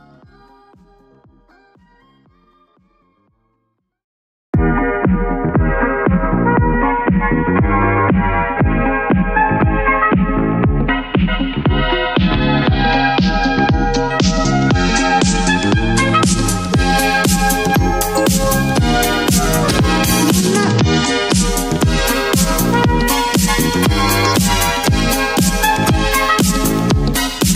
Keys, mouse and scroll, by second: 0.6 click, 6.3 ], 6.5 ], 8.1 click, 22.4 click, 26.1 click, 26.2 ctrl+h.